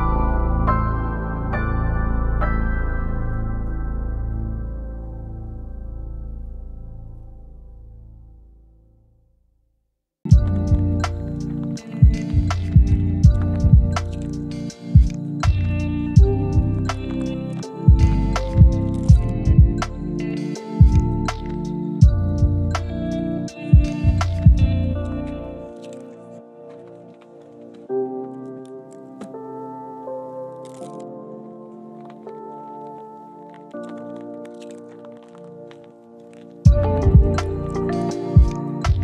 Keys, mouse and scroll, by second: 0.0-0.7 scroll up 1, 0.7 right click, 1.7 click, 2.2 click, 6.6-7.7 right drag, 7.7 right click, 8.5 right click, 9.5-10.6 scroll up 1, 10.6 scroll down 1, 10.9-11.4 scroll up 1, 11.4 scroll down 1, 11.5 scroll up 1, 12.1 scroll down 1, 12.4-13.0 scroll up 1, 13.0 scroll down 1, 13.1-14.0 scroll up 1, 14.0-14.9 scroll down 1, 14.9 right click, 15.2 scroll down 1, 15.3 scroll up 1, 15.4 right click, 15.8 scroll up 1, 16.7 click, 17.5-17.8 scroll down 1, 17.8 right click, 18.3 scroll down 1, 18.5 scroll up 1, 18.6 right click, 19.2-19.6 scroll up 1, 19.6 right click, 19.9 scroll down 1, 20.2 right click, 20.4 click, 26.2 scroll up 1, 26.4 right click, 27.0 scroll up 1, 27.2 right click, 27.5 scroll down 1, 27.6-28.4 scroll up 1, 28.4 click, 29.7-31.5 scroll down 1, 34.5 click.